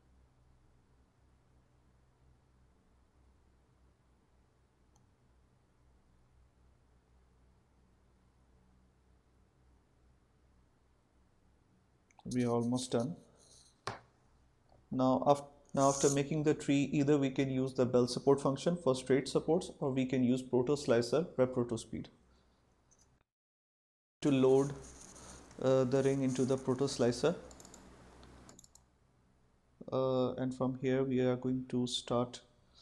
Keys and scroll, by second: 14.2 Caps_Lock.